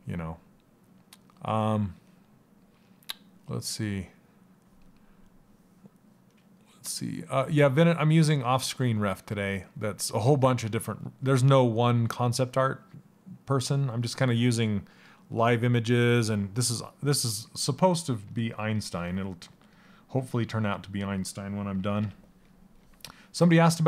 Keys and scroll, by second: 17.7 s, 18.9 s, 21.3 ].